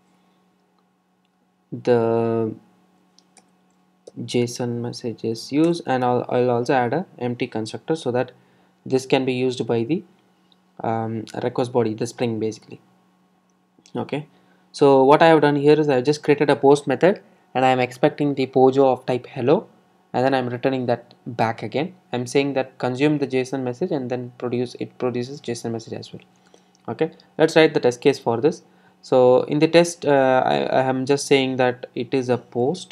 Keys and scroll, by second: 3.7 super+n, 26.0 alt+super+l.